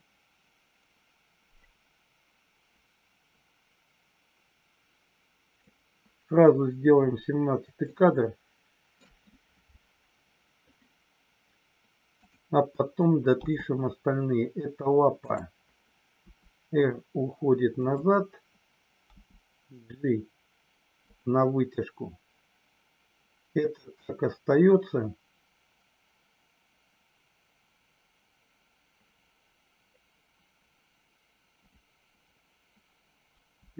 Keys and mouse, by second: 7.8-9.0 shift+middle drag, 12.1 click, 16.1 r, 17.8 click, 19.1 g, 21.0 click.